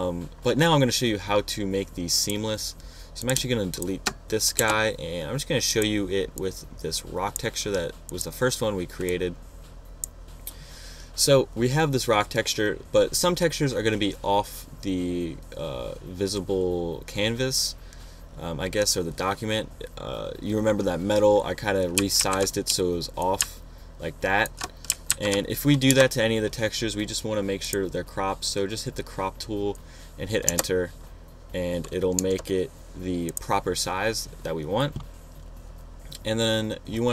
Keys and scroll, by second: 5.0 shift+BackSpace, 5.5 BackSpace, 22.6 super+t, 23.1 shift+super+t, 25.5 alt+shift+super+z, 26.1 shift+super+z, 26.3 super+Return, 26.8 Return, 30.9 Return, 32.6 Return.